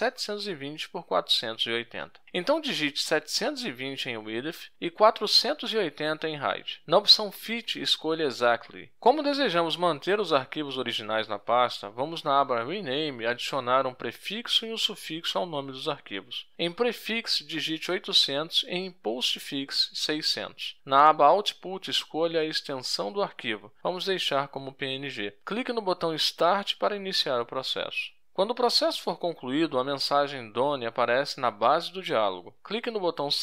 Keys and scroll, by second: 1.9-3.2 typing, 16.9-20.0 typing, 18.4 Tab.